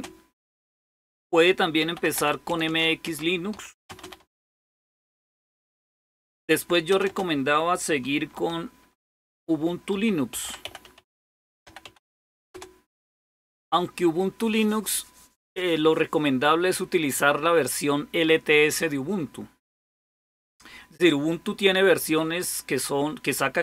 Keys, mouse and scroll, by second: 1.4-4.9 typing, 5.9-7.2 typing, 8.6-12.9 typing.